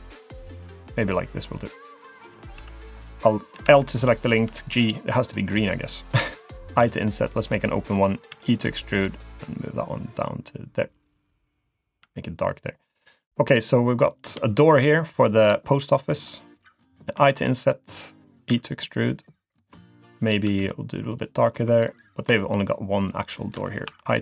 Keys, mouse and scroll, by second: 2.6 3, 2.7 click, 3.5 l, 4.5 g, 5.7 click, 6.7 i, 8.3 e, 9.2 click, 12.0 g, 12.9 click, 13.2 middle click, 14.1 click, 14.6 shift+click, 14.9 shift+click, 15.2 click, 15.6 scroll up 1, 15.9 middle click, 17.2 i, 18.5 e, 20.4 g, 21.9 click, 22.2 click, 22.6 shift+click, 23.1 shift+click, 23.9 i.